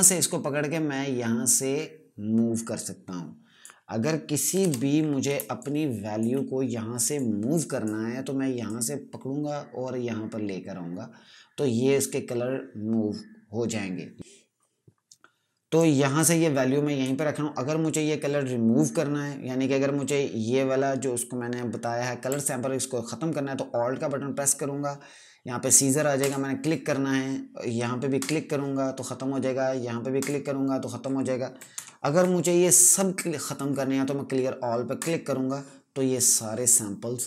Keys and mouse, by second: 4.5 KP_Add, 5.3 space, 5.5 click, 5.8 space, 7.0 click, 15.7 click, 22.2 alt+Num_Lock, 26.1 click, 28.1 click, 30.1 click, 31.6 ctrl+KP_Subtract, 34.9 click.